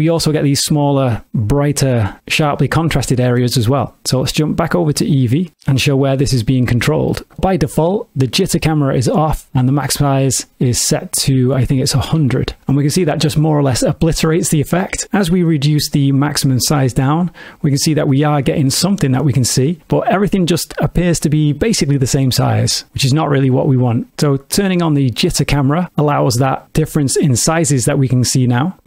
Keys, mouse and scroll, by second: 4.0 click, 5.7 middle click, 8.4 click, 10.1 click, 11.2 click, 12.1 KP_0, 15.3 click, 24.8 click.